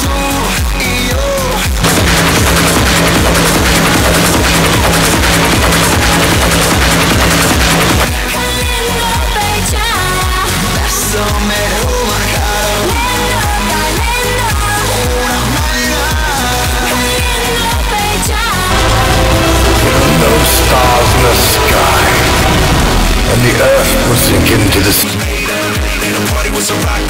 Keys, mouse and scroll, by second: 8.0 Page_Down, 17.8 click, 21.9-23.1 drag, 25.2 Page_Down.